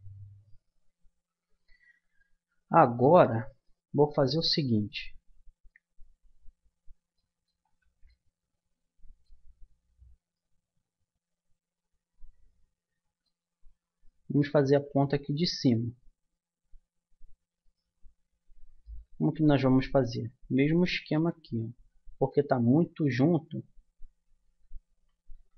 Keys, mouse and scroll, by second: 1.0-8.5 middle drag, 7.7 Tab, 11.4 middle click, 13.7 middle click, 14.7 a, 16.9 middle click, 17.6-18.8 drag, 19.3-23.1 middle drag, 23.1 Tab, 24.5 a, 24.9 a, 25.3 a.